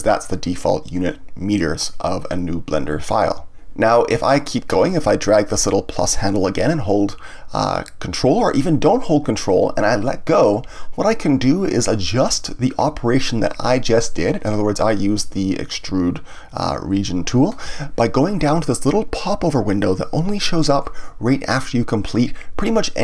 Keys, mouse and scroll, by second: 6.0-9.0 drag.